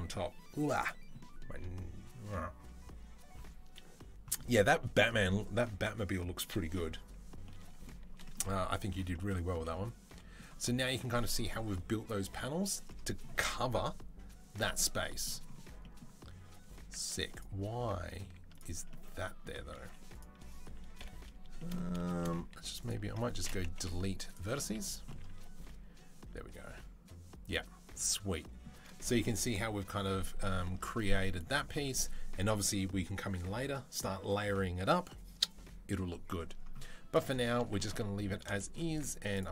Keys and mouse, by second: 16.3 Tab, 16.9 Tab, 18.0 z, 19.6 z, 20.8 KP_7, 23.5 Delete, 24.4-36.9 middle drag, 24.4 z, 30.6 Tab, 36.9 click, 37.0-38.7 middle drag, 38.8-39.5 middle drag.